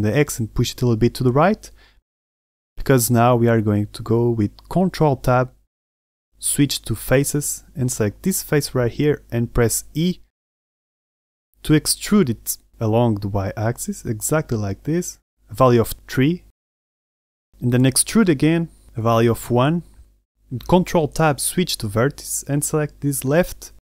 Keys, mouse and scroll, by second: 0.4 g, 6.6 ctrl+Tab, 9.1 right click, 11.2 middle click, 11.3 z, 11.4 middle click, 11.9 KP_7, 12.5 z, 12.5 e, 16.0 scroll down 2, 16.2 shift+middle click, 16.2 scroll up 2, 16.2 g, 17.9 e, 21.6 shift+middle click, 21.6 scroll up 2, 21.6 KP_7, 22.0 ctrl+Tab.